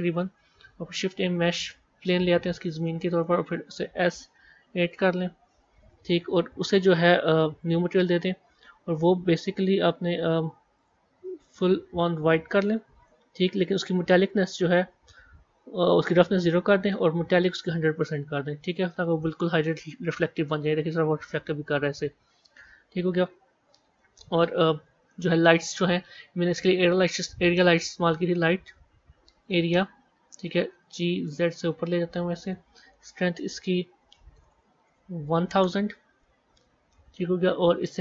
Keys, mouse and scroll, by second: 0.8 shift+a, 2.8 middle click, 3.2-3.8 scroll down 1, 3.8 s, 5.3 scroll down 3, 6.8 click, 7.6-10.6 drag, 10.8 click, 13.6 scroll down 1, 16.2-19.5 drag, 19.5 scroll up 3, 20.0 scroll down 1, 20.6-23.2 middle drag, 23.2 KP_1, 23.6 scroll down 1, 24.4-25.6 middle drag, 25.6 shift+a, 30.7 g, 33.2-34.5 drag, 34.5 KP_0.